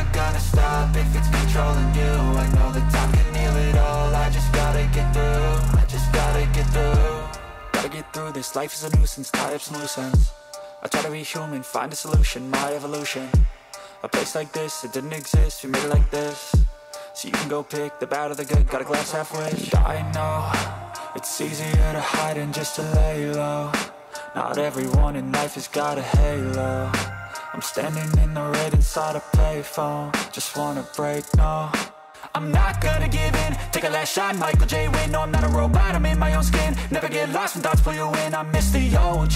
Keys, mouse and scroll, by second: 1.4 middle click, 2.9 middle click, 5.2 alt+middle click, 5.7 alt+middle click, 21.3 middle click, 33.4 click, 38.2 click.